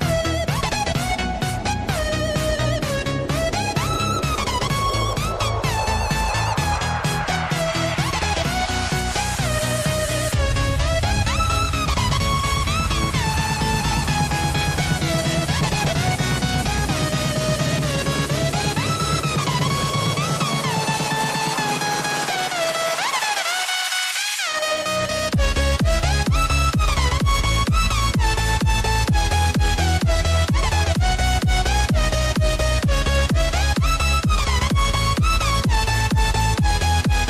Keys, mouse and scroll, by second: 0.1-1.3 drag, 4.1 click, 10.9 click, 12.2-14.1 drag, 15.6 click, 16.1 click, 16.7 click, 18.7 click, 19.0-19.6 scroll up 1, 20.6 click, 22.2 click, 22.6 Tab, 23.4 click, 24.2 shift+click, 24.6 shift+click, 25.1 shift+click, 26.2 ctrl+b, 29.1 Tab, 29.6-30.4 scroll down 2, 30.4 click, 31.3 click, 35.0-36.7 drag.